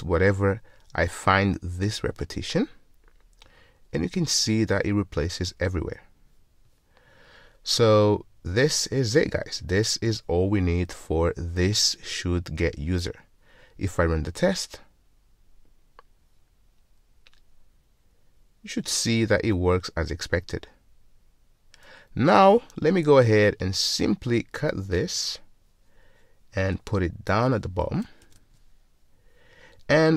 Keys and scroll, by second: 3.1 alt+super+m, 25.1 super+x, 28.6 super+v.